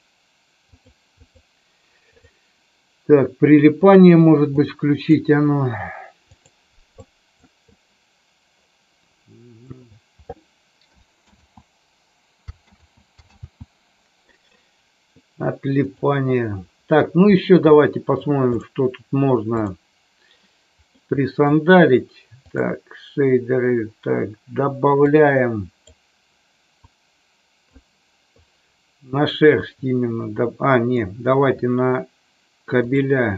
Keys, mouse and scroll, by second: 4.6-5.1 drag, 6.3 click, 7.0 click, 7.8-9.6 drag, 11.3 ctrl+z, 12.6 ctrl+z, 13.4 ctrl+z, 15.7 click, 17.8-18.1 middle drag, 18.4 click, 19.5 click, 21.0 middle click.